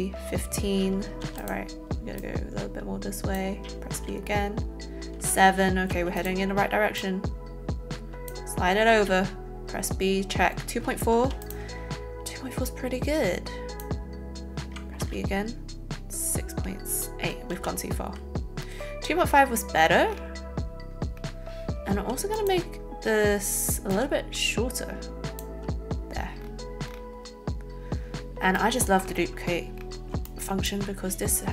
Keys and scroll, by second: 1.2 a, 4.0 b, 6.0 a, 8.9 b, 17.5 ctrl+z, 21.9 z.